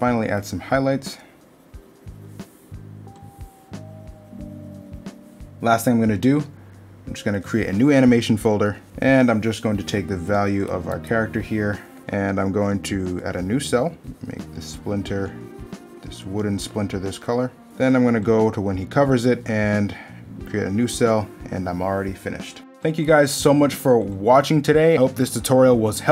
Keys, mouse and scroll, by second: 8.9 middle click, 21.4 middle click.